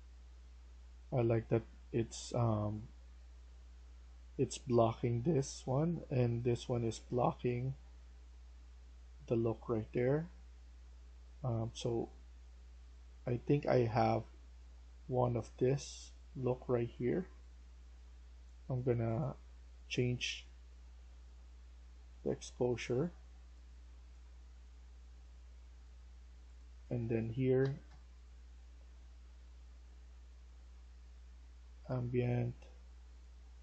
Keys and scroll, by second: 27.4 typing.